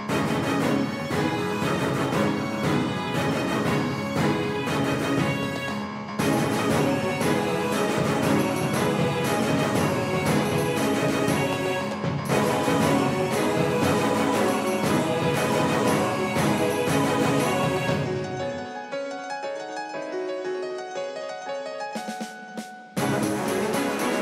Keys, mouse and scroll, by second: 3.0-7.2 middle drag, 15.8-18.0 right drag, 21.1-24.2 drag.